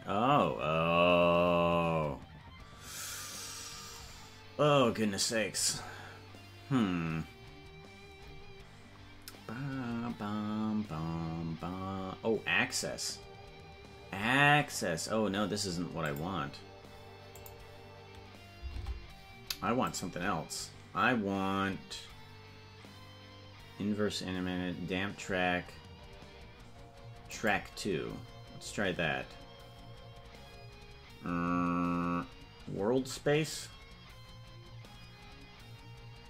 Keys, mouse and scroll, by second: 16.0 click, 17.3 click, 18.7 ctrl+Tab, 19.8-28.0 drag.